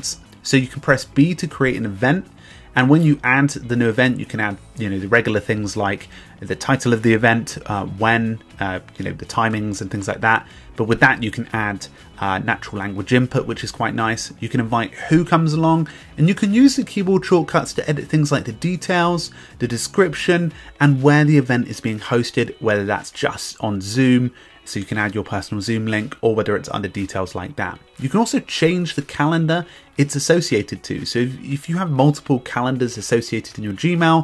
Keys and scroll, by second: 4.8 Return.